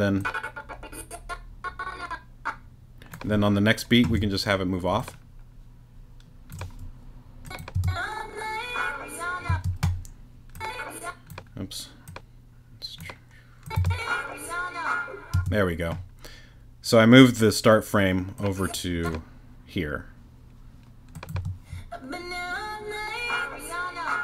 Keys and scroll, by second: 7.7 space, 9.5 space, 13.7 space, 15.3 space, 21.3 space.